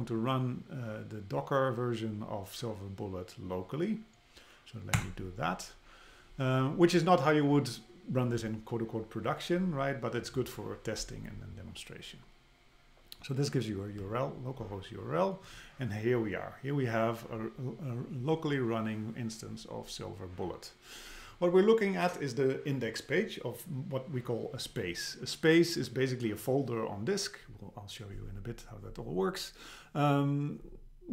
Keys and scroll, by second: 5.0 Return.